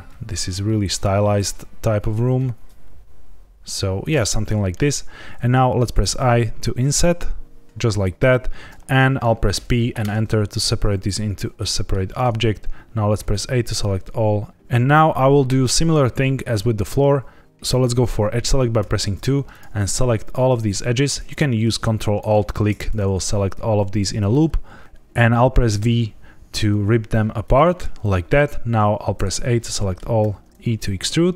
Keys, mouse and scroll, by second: 3.9 click, 4.7 shift+middle click, 5.7 i, 7.6 click, 9.5 p, 11.5 middle click, 12.1 shift+middle click, 12.4 scroll up 1, 13.1 a, 14.5 ctrl+z, 18.7 2, 19.4 click, 20.2 shift+click, 22.1 ctrl+alt+click, 25.7 v, 27.4 right click, 29.1 a, 29.6 middle click, 30.1 e.